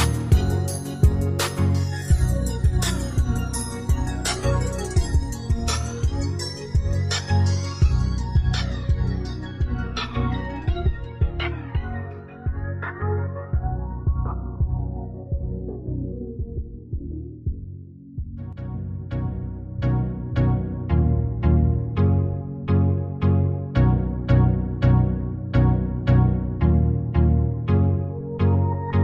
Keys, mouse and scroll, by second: 13.2 ctrl+g.